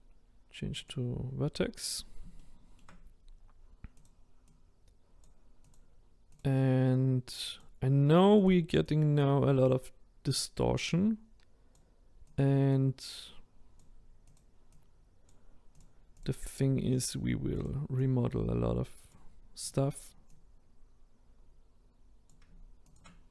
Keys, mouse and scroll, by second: 0.9 click, 1.3-2.4 scroll up 3, 2.4 shift+middle click, 3.1-3.6 scroll up 1, 4.0 click, 4.6 click, 6.4 click, 7.0 click, 8.9 click, 12.4 click, 12.8 click, 14.3 click, 14.8 click, 15.8 click, 16.6 click, 17.6 click, 19.7 click, 20.3 click, 22.9 shift+click.